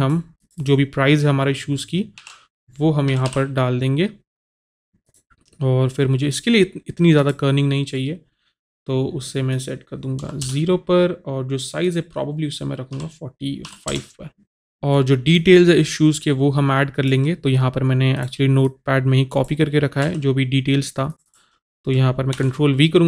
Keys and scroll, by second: 2.1 shift+4, 3.1 KP_9, 3.3 KP_8, 10.3 KP_0, 10.5 Return, 13.6 KP_5, 13.9 Return, 20.0 ctrl+c, 22.4 ctrl+v.